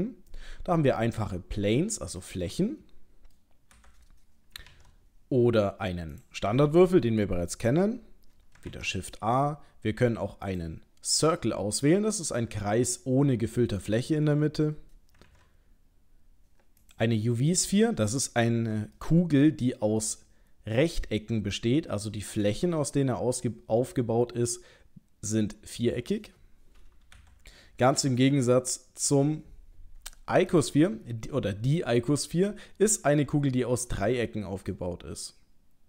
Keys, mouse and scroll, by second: 2.2 middle click, 3.8 Delete, 4.6 shift+a, 8.6 shift+Delete, 8.7 shift+a, 11.2 middle click, 14.3 Delete, 15.3 shift+a, 17.5 middle click, 19.0 ctrl+middle click, 27.2 End, 27.2 Delete, 28.3 shift+a, 33.2 middle click.